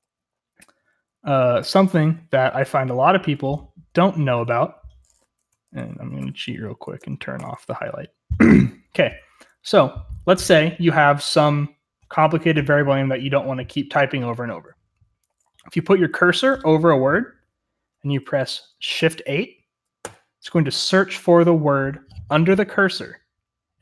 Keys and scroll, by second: 1.5 ctrl+c, 3.3-6.8 typing, 6.9 Tab, 7.3 Return, 7.9-8.4 k, 8.6-9.1 j, 9.6 k, 10.1 h, 15.5-16.9 typing, 20.0 typing.